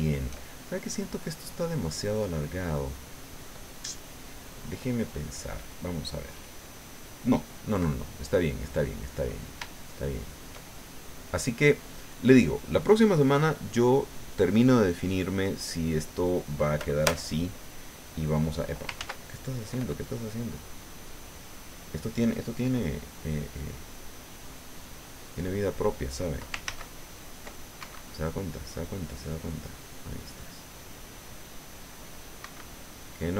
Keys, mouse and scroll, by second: 0.4-1.5 shift+drag, 1.9 click, 3.6-5.4 drag, 8.5 click, 9.0 middle click, 9.7 shift+middle click, 11.0 click, 11.5 click, 15.6 ctrl+scroll down 2, 16.5 right click, 17.1 right click, 17.5-23.2 drag, 18.8-23.2 ctrl+right drag, 19.0 ctrl+z, 23.2 ctrl+scroll up 2, 26.4 ctrl+scroll down 2, 26.5 ctrl+scroll up 2, 26.6 ctrl+z, 26.9-29.2 ctrl+drag, 27.8 ctrl+Escape, 30.5 right click, 30.8-32.2 right drag, 31.0-32.2 drag, 32.2 click, 32.4 Escape, 32.4 right click, 33.0 click.